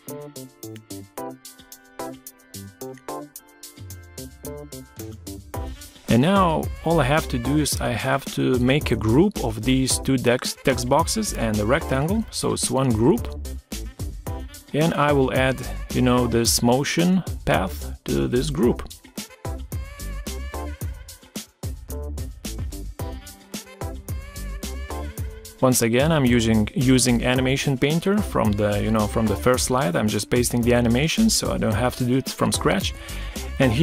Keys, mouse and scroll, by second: 0.2 ctrl+scroll up 1, 9.6 shift+click, 10.5 ctrl+g, 11.5 shift+click, 15.2 ctrl+z, 16.8 ctrl+scroll down 1, 29.6 ctrl+scroll up 1, 30.9 shift+click.